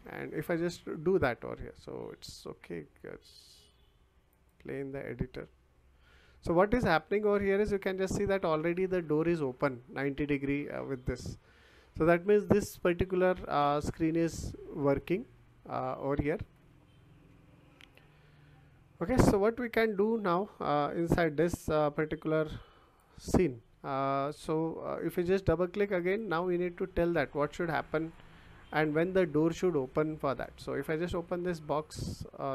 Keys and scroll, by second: 17.0 Escape.